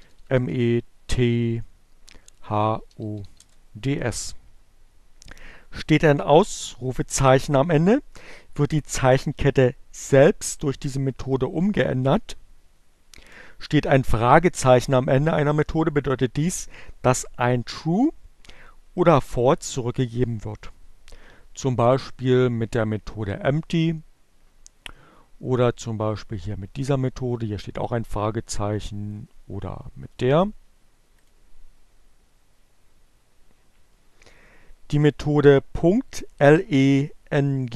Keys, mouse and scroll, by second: 1.4-2.4 typing, 25.2-26.4 drag, 28.1-29.8 drag, 30.5 click.